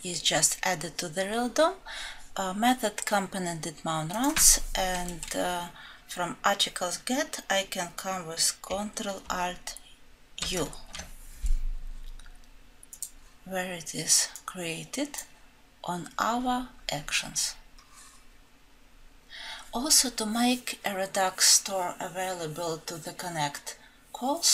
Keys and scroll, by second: 10.5 ctrl+alt+F7.